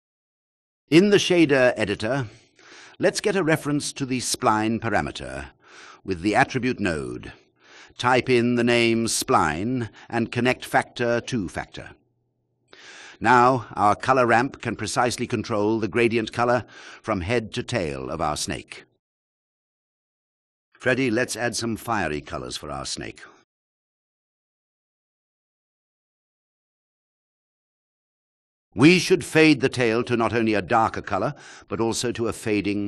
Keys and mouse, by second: 2.6 shift+a, 5.7 BackSpace, 7.2-11.4 drag, 9.8 BackSpace, 18.3-21.0 drag, 22.8 click, 23.2-25.2 drag, 25.3 click, 26.8 click, 27.2-29.2 drag, 30.7 drag.